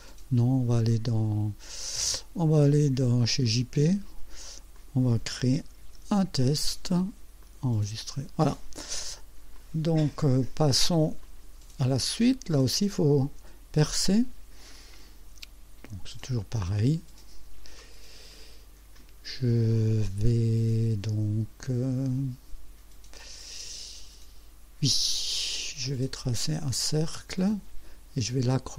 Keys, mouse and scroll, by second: 3.5 click, 4.8 click, 5.4-6.9 typing, 7.4 click, 8.4 click, 9.5-11.0 drag, 11.2 click, 16.2 click, 17.8-18.5 right drag, 27.1 click.